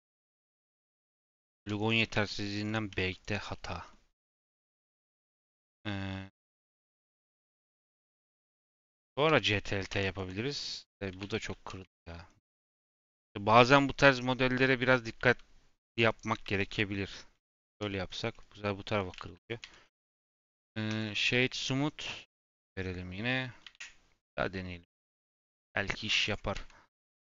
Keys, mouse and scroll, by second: 1.2 ctrl+z, 1.5 ctrl+r, 2.1 ctrl+r, 3.4 middle click, 4.3 Tab, 4.7-5.9 middle drag, 5.9 Tab, 6.9 Tab, 7.1-8.3 middle drag, 8.3-9.2 scroll down 2, 9.2 Tab, 9.4 a, 9.8 ctrl+t, 10.1 Tab, 10.5 middle click, 11.1 ctrl+z, 11.3 ctrl+z, 11.8 Tab, 11.9-12.3 middle drag, 12.3-12.7 scroll up 2, 12.7-14.2 shift+middle drag, 14.2 scroll up 1, 14.4 middle click, 14.8 Tab, 16.1 click, 16.9 j, 18.0 Tab, 18.3 middle click, 19.1 ctrl+z, 19.3 ctrl+z, 19.6 Tab, 20.9-22.5 right drag, 22.5-23.7 scroll down 1, 23.7 ctrl+shift+e.